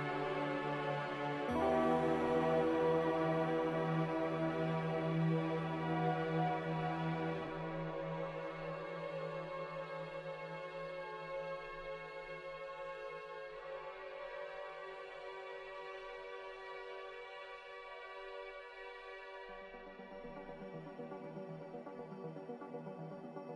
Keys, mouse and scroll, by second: 3.2 Delete, 12.8 a, 13.8 ctrl+c, 14.0 ctrl+v.